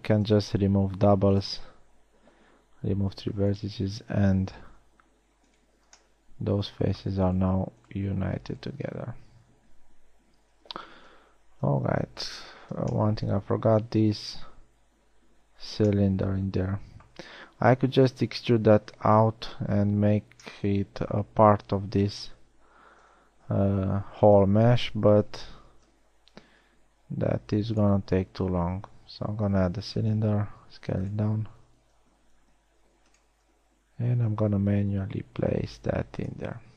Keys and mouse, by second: 0.6 ctrl+v, 3.7 a, 5.3 g, 8.5 right drag, 8.8 g, 9.5 middle click, 9.7-10.7 right drag, 10.7 a, 11.7 KP_1, 13.2 z, 16.3 z, 23.7 KP_1, 24.3 z, 26.4 shift+a, 29.1 s, 32.7 g, 35.0 s.